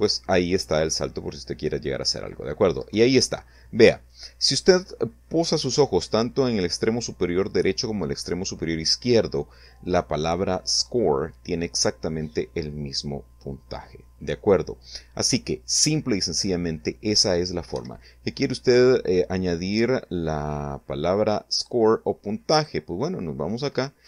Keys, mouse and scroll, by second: 1.8 Down, 16.7 Escape, 20.5 click, 21.5 click, 23.1 shift+a, 24.0 click.